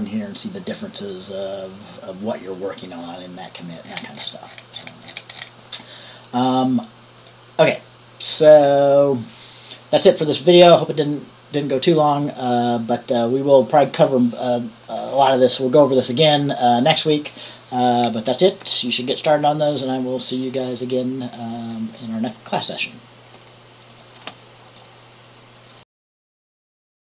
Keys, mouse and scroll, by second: 4.3-4.7 scroll up 1, 9.3 Left, 21.6 click, 22.0 click, 25.0 click.